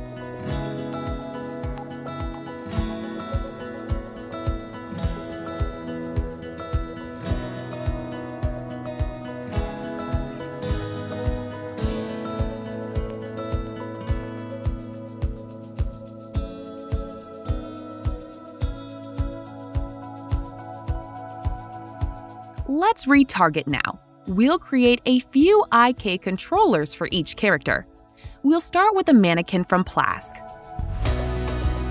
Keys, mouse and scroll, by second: 2.4 click, 4.5 click, 4.8 middle click, 4.8 middle click, 6.6 click, 6.6-7.7 scroll, 7.7 click, 11.4 click, 12.4 click, 16.6 click, 20.1 right click, 20.1 click, 20.1 w, 22.0 click, 22.3 click, 22.3 scroll, 23.4 right click, 27.2 click.